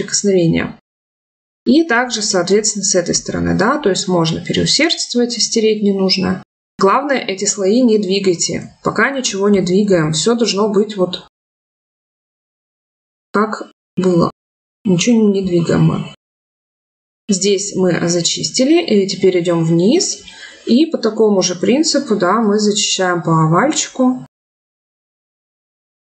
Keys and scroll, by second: 8.3 ctrl+z, 11.0 ctrl+z.